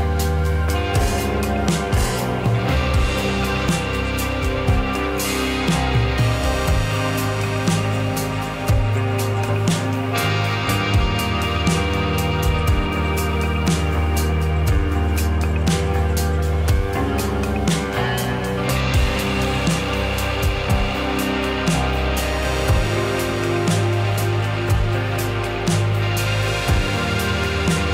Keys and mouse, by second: 0.3 shift+a, 1.4 s, 3.1 middle click, 15.2 s, 16.0 shift+click, 16.3 middle click, 18.9 click, 19.8 middle click, 20.2 shift+click, 21.5 Tab, 22.1 click, 22.3 middle click, 23.0 shift+click, 27.0 ctrl+b.